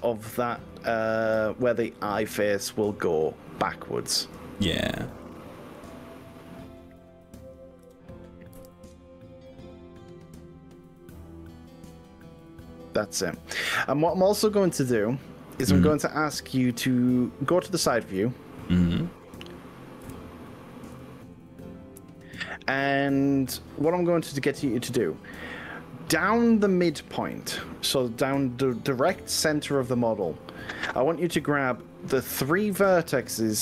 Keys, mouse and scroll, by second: 2.8 click, 4.4 shift+click, 5.4 shift+click, 8.0 g, 8.6 y, 12.0 click, 12.4-17.8 middle drag, 17.8-19.4 drag, 20.0 KP_1, 20.9 KP_3.